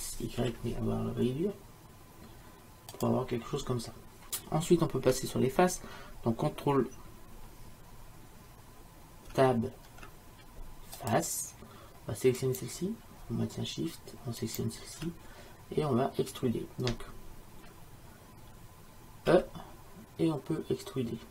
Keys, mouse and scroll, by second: 9.4 ctrl+Tab, 12.5-14.5 drag, 15.6-19.4 middle drag, 19.4 e.